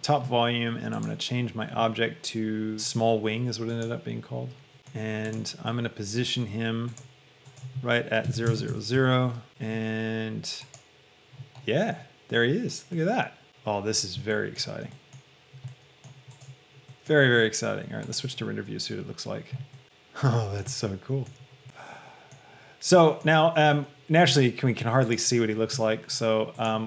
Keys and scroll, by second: 8.3 KP_0, 8.6 Tab, 9.0 Return.